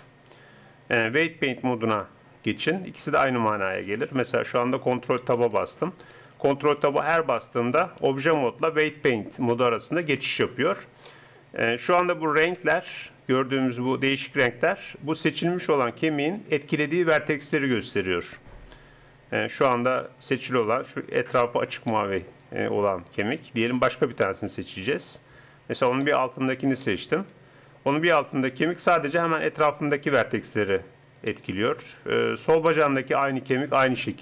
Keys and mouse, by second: 4.3 ctrl+Tab, 5.7 ctrl+Tab, 6.3 ctrl+Tab, 6.9 ctrl+Tab, 8.1 ctrl+Tab, 8.6 ctrl+Tab, 9.5 ctrl+Tab, 10.1 ctrl+Tab, 19.1-21.9 middle drag, 24.9 click, 25.6 click, 26.2 click.